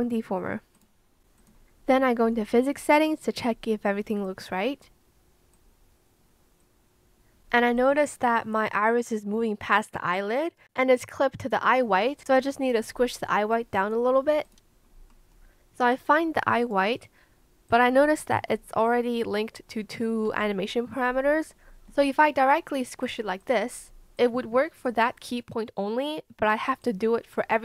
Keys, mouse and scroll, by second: 22.0 click.